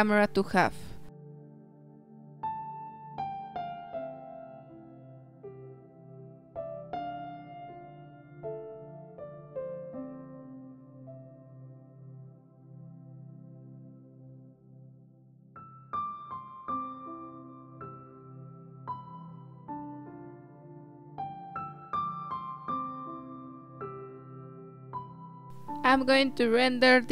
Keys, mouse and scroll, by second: 1.5-5.0 drag, 6.7-10.2 drag, 10.9-11.9 drag, 13.2-15.8 drag, 17.5 click, 18.0 click, 19.3 click, 20.3 BackSpace, 20.9 click, 22.1 click, 22.3 z.